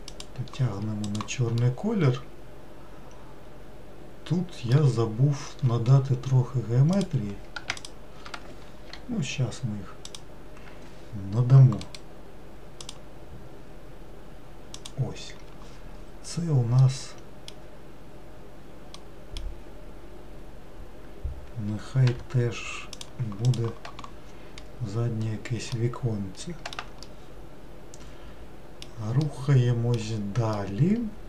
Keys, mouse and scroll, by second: 1.3 click, 1.9-4.8 middle drag, 7.1 click, 9.0 i, 13.1-22.3 right drag, 22.3 g, 23.7 click, 25.4-25.9 scroll down 1, 25.9-31.2 middle drag.